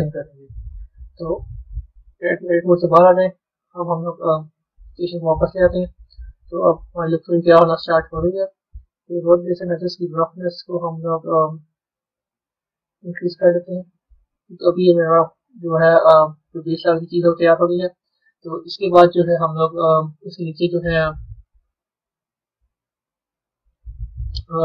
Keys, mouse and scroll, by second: 1.9 Tab, 4.3 click, 5.1 scroll up 4, 5.6-6.2 scroll up 2, 6.2-9.2 middle drag, 9.3-10.1 scroll down 2, 10.1-10.7 scroll down 2, 11.2-12.6 scroll down 1, 12.6-14.0 drag, 14.0-16.7 middle drag, 16.7-18.2 scroll down 5, 18.2-20.3 middle drag, 20.3-20.8 scroll down 1, 20.8-21.9 middle drag, 21.9-23.2 scroll up 8, 23.2-24.6 middle drag.